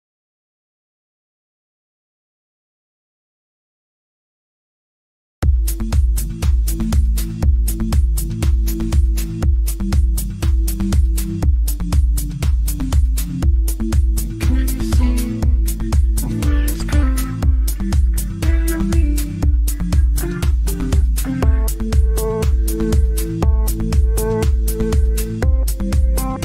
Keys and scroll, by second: 4.2 Delete, 10.2 Delete, 18.2 shift+F2, 18.5 F3.